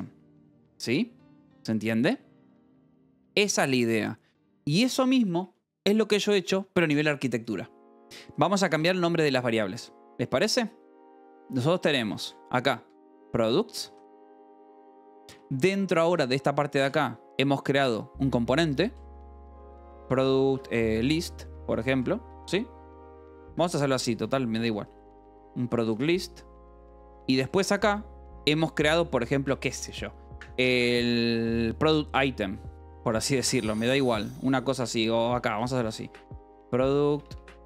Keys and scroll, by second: 8.2-9.1 typing, 10.2-17.2 typing, 18.3-28.6 typing, 20.4 Escape, 21.5 Escape, 23.4 Escape, 32.8-37.6 typing.